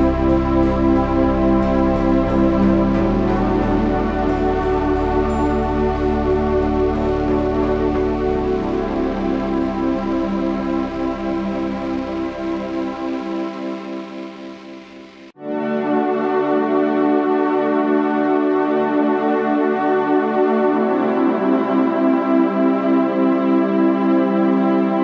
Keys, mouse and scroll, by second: 5.8 Tab, 6.1 shift+a, 7.5 s, 11.3 Tab, 12.9 z, 13.1 z, 15.3 e, 18.7-21.0 drag, 19.4 e, 21.4 s, 23.2 ctrl+r, 24.5 s.